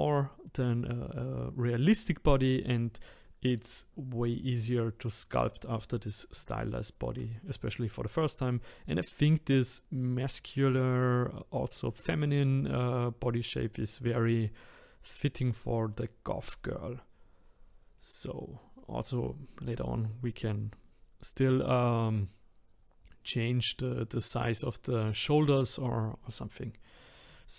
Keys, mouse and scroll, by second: 17.4-17.9 scroll down 1, 17.9-21.0 scroll up 1, 26.8-27.3 scroll down 1, 27.3 click.